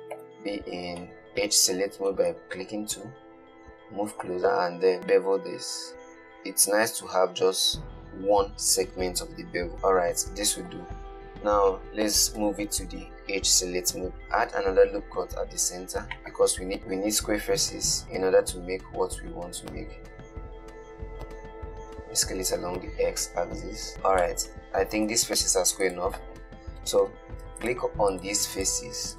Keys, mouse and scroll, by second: 0.4 2, 1.5 shift+middle click, 2.5 shift+middle click, 3.2-5.0 scroll up 1, 5.1 ctrl+b, 9.7-11.1 middle drag, 12.6 /, 14.1 ctrl+r, 16.8 alt+click, 18.0 alt+shift+click, 19.8 s, 24.5-25.8 middle drag, 25.8 3, 26.1 click, 27.9 click, 28.4 shift+click, 28.8 shift+click.